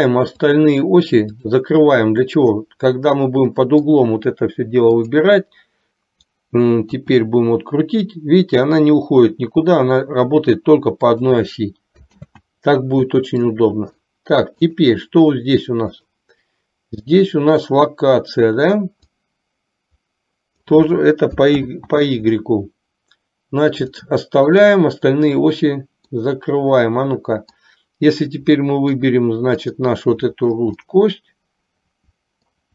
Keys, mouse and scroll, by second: 0.7 drag, 2.5-4.0 middle drag, 5.0 click, 7.2 r, 12.4 ctrl+z, 13.5-14.3 middle drag, 14.8 click, 16.0 click, 19.3-20.9 drag, 21.9 ctrl+z, 24.2 click, 24.7 click, 26.3-27.8 middle drag, 28.8-29.3 middle drag, 29.8 click, 30.9-32.7 middle drag.